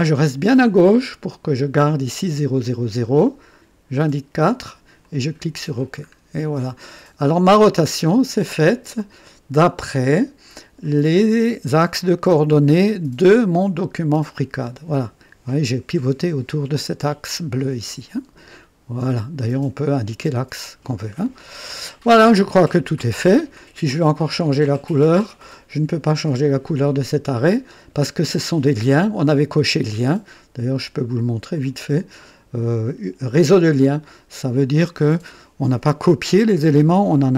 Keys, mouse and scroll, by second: 3.7 scroll down 1, 5.0 click, 6.0-6.3 scroll up 1, 6.5 right click, 7.3 click, 9.0 click, 10.8 click, 12.0 click, 13.4-13.8 scroll up 2, 14.0-14.4 scroll down 2, 17.9-19.5 drag, 20.9 scroll down 1, 21.4-23.1 drag, 24.9 click, 31.5 click, 34.3 click.